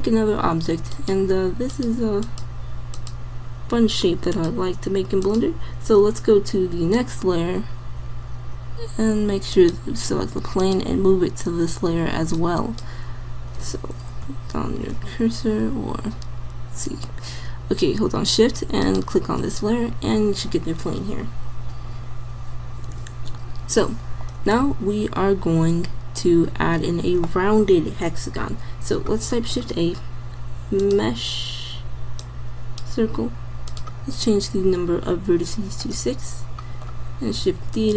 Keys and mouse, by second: 7.0-9.6 middle drag, 13.9 middle click, 14.3 m, 18.8-20.5 drag, 29.3 shift+a, 37.6 shift+d.